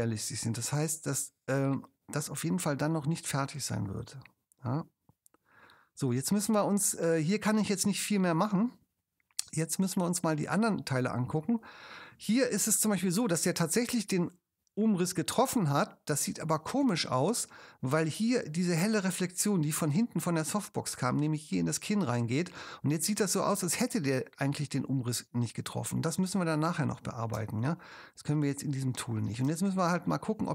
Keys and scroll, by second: 6.2 space, 27.4 space, 29.5 super+space.